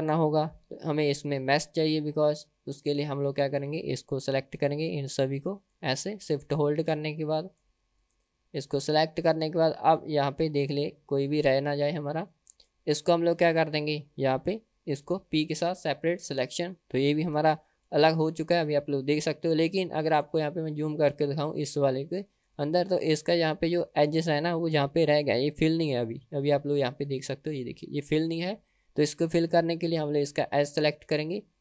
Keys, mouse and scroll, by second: 0.6 Tab, 3.3 click, 3.9 click, 5.2 middle click, 6.2 shift+click, 7.2 middle click, 8.1 shift+click, 9.0-10.1 middle drag, 10.4-10.8 scroll up 2, 10.8-11.8 middle drag, 12.0-12.4 scroll down 1, 12.4 middle click, 12.8-13.2 scroll down 1, 13.2 middle click, 15.5 p, 17.2 Tab, 18.0 g, 19.4-19.8 scroll up 2, 19.8-20.4 middle drag, 20.6-21.4 scroll up 2, 21.4 click, 22.0-22.6 middle drag, 22.8-23.3 shift+middle drag, 23.6 middle click, 24.6-25.3 middle drag, 25.9-26.7 middle drag, 26.8 scroll up 3, 27.2-27.7 shift+middle drag, 27.9-28.4 middle drag, 29.4 Tab, 30.6 click.